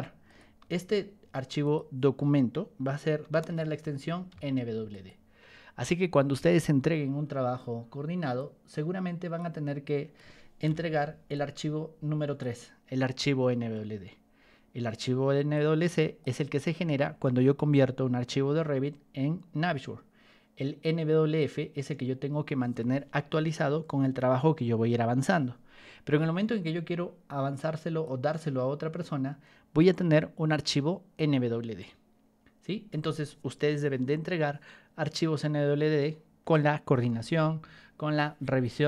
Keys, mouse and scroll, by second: 0.0-0.6 typing, 0.2 click, 1.6 click, 3.2 n, 3.8 w, 4.2 d, 4.8 click, 8.3-9.3 ctrl+drag, 10.6 p, 11.3-12.3 drag, 15.5 click, 21.3 click, 27.5 click.